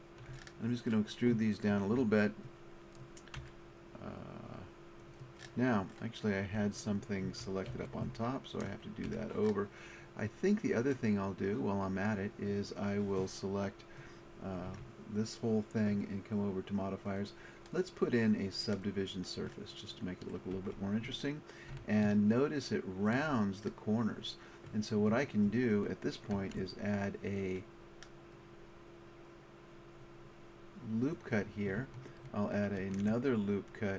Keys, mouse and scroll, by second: 3.1 middle click, 3.4 e, 5.1-6.8 drag, 7.3 ctrl+z, 7.7 ctrl+z, 9.1 a, 14.7 Tab, 17.1-18.8 drag, 19.6 click, 20.6 Tab, 21.4-23.7 middle drag, 25.6 middle click, 26.3 ctrl+r, 31.3 click, 32.6 click, 32.8 ctrl+r.